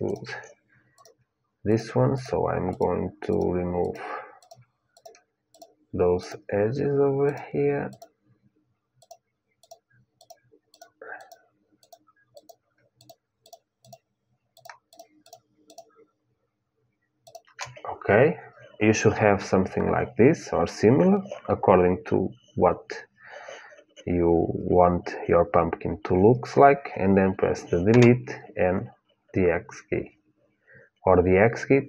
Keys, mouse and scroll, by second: 27.6 Delete.